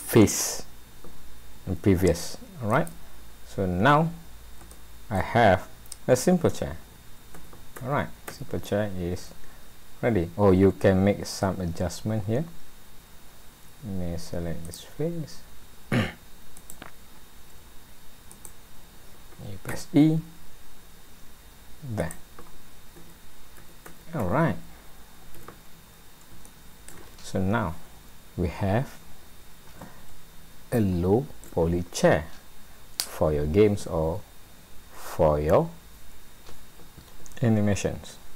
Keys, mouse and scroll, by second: 2.1 middle click, 2.8 right click, 3.9-4.6 scroll down 5, 4.7 shift+middle click, 5.4-5.8 scroll down 1, 6.2-6.6 scroll down 2, 6.8 a, 7.3 a, 7.8 a, 9.2 alt+a, 9.8-10.9 scroll up 3, 10.9 shift+middle click, 11.7-13.3 scroll up 6, 14.6 click, 16.6 click, 17.1-17.6 scroll down 2, 18.3 shift+click, 19.7 e, 22.4 scroll down 3, 23.0 a, 23.6 a, 25.3 alt+a, 26.0-26.5 scroll down 3, 26.5 shift+middle click, 30.8 shift+middle click.